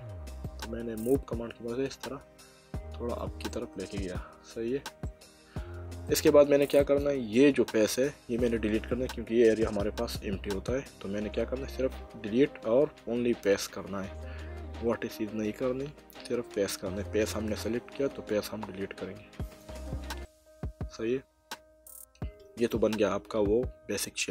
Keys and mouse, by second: 0.4 click, 3.5 middle click, 6.1 click, 9.6 Delete, 19.4 click, 20.2 middle click.